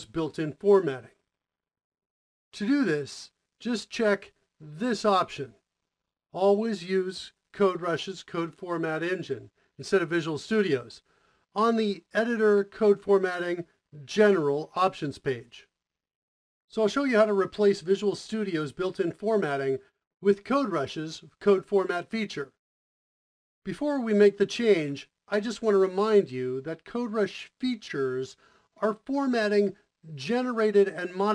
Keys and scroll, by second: 22.9 Return, 22.9 ctrl+alt+shift+o.